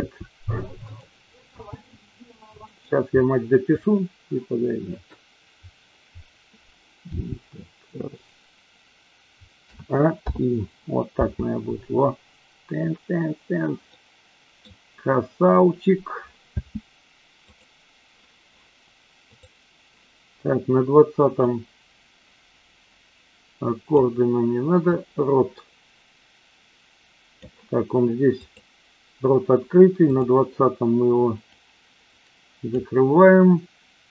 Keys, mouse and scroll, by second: 0.0 r, 0.9 click, 1.5 g, 2.7 click, 7.1 g, 8.1 click, 9.7 a, 10.1 i, 11.1 space, 13.9-14.5 middle drag, 16.5 space, 17.5 click, 19.3 click, 21.4-24.0 drag, 24.8-27.6 drag, 28.3 click, 30.0 click, 31.4-32.7 drag.